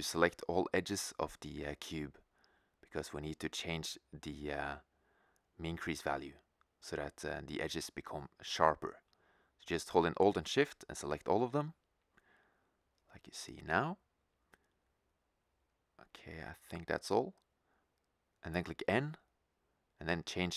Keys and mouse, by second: 5.2-6.7 right drag, 6.9 middle click, 11.6-13.1 middle drag, 13.1-15.5 right drag, 15.5 middle click, 15.7 right click, 16.3 middle click, 18.9 n.